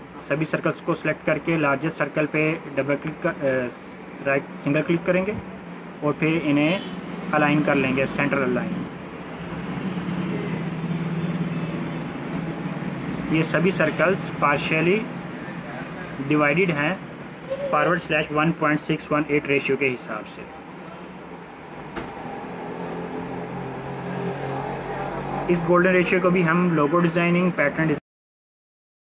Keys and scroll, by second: 13.9 ctrl+z, 16.3 ctrl+g, 19.6 ctrl+-, 19.8 ctrl+-, 20.0 ctrl+-, 23.1 ctrl+=, 24.2 ctrl+=.